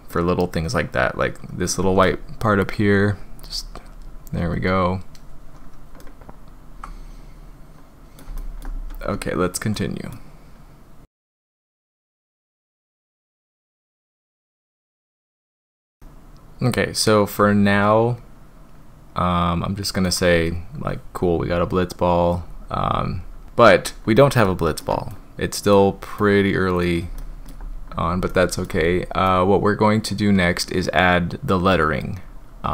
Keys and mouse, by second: 3.4-4.5 drag, 6.0-8.2 middle drag, 8.3 shift+middle drag, 9.7-10.1 middle drag, 11.2 middle click, 11.3 click, 11.9 shift+middle click, 12.6 shift+middle click, 13.4 middle click, 13.6 click, 13.8 middle drag, 14.0 middle click, 14.2 middle click, 14.2 shift+click, 14.3 click, 14.4 ctrl+z, 14.4 click, 14.7 click, 14.8 click, 15.1 middle click, 15.5 middle click, 15.6 click, 15.9-20.0 shift+middle drag, 21.5-22.3 drag, 22.9 click, 23.4-23.8 middle drag, 24.4 middle click, 25.1-25.7 shift+drag, 26.2-26.8 drag, 27.1-27.5 shift+drag, 28.3 shift+click, 29.2 click.